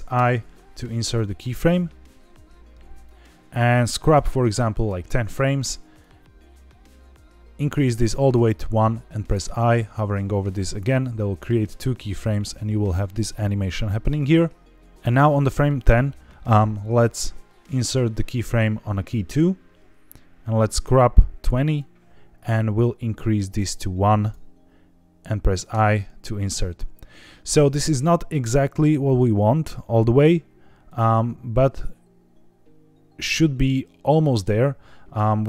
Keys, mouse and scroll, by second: 0.1 i, 3.0-4.8 drag, 5.9-7.7 drag, 12.2-14.8 drag, 19.0 i, 20.5-21.7 drag, 22.7-24.4 drag, 25.6 i, 30.8-35.1 drag.